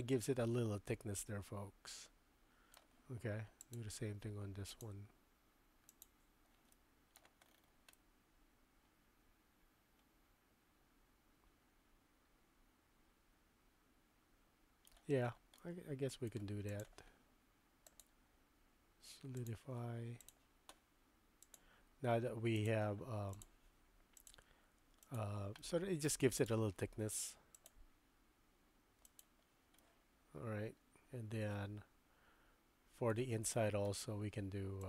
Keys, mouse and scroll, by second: 1.0 click, 1.1 middle click, 1.5 click, 1.6-2.8 middle drag, 3.6 click, 4.8-6.1 drag, 6.7-7.2 middle drag, 8.0-14.9 middle drag, 15.6-16.3 middle drag, 16.7 click, 17.8-19.5 drag, 21.5-22.7 drag, 23.4 click, 24.3-25.2 drag, 25.6-26.1 middle drag, 26.4 click, 27.5-29.3 drag, 29.8-33.2 middle drag, 33.6-33.9 shift+middle drag.